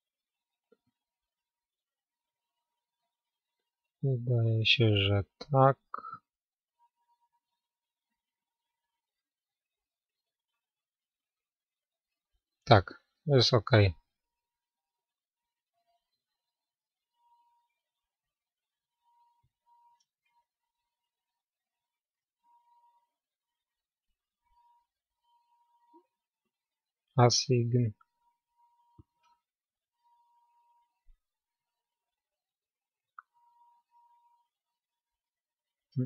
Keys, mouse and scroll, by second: 1.0-18.1 middle drag, 18.1 ctrl+a, 18.1 ctrl+z, 19.1-22.5 middle drag, 22.5-28.7 drag, 23.1-26.7 middle drag, 28.7 a, 29.5-33.5 middle drag, 33.5-36.0 right drag.